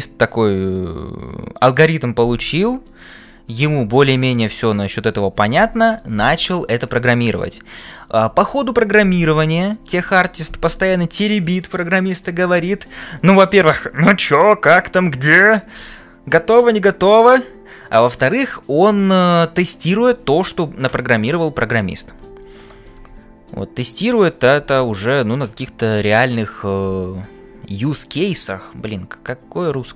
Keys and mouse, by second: 21.2 click, 24.7 g, 25.8 click, 26.3-27.9 middle drag.